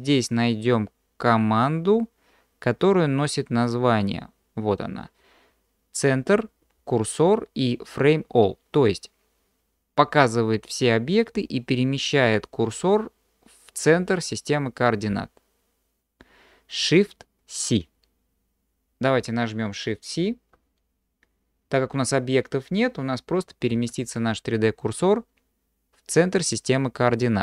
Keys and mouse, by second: 23.7 shift+c.